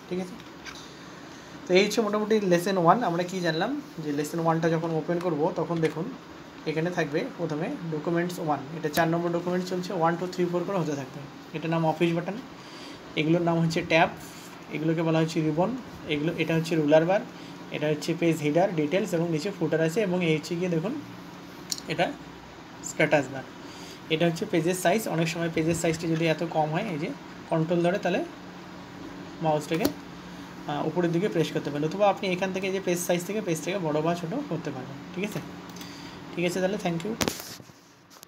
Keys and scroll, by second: 6.3 ctrl+n.